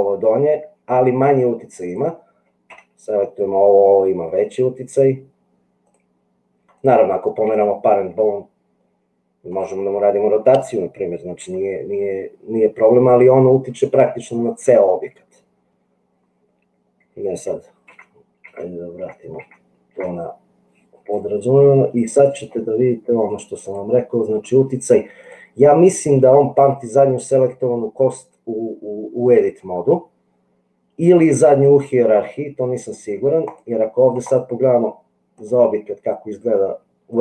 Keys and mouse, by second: 2.9 g, 7.6 g, 11.6 r, 17.9 ctrl+z, 18.6 ctrl+z, 19.1 ctrl+z, 19.3 ctrl+z, 23.4 click, 26.5 click, 33.4 click, 34.3 click, 35.3-37.2 drag.